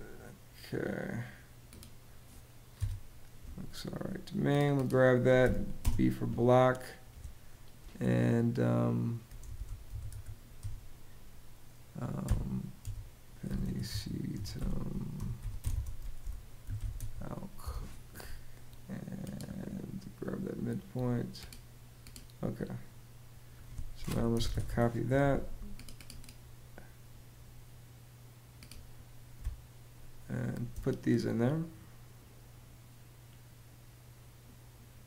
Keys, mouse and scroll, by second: 2.4 BackSpace, 5.1 b, 5.5 space, 9.0-10.8 typing, 11.9-17.1 typing, 17.3 click, 17.8 click, 23.8-24.7 typing, 29.1 space.